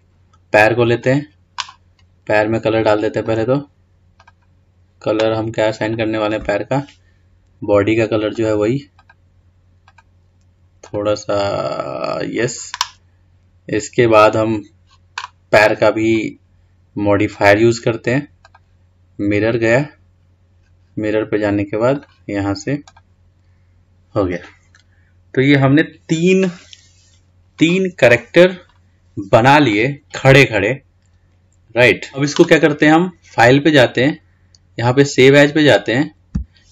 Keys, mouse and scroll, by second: 1.1 click, 3.5 click, 4.4-6.2 drag, 17.5 click, 18.6-21.6 drag, 22.2 click, 28.3-28.8 scroll down 3, 28.8-29.9 scroll up 2, 29.9-31.9 middle drag, 33.8-36.7 drag.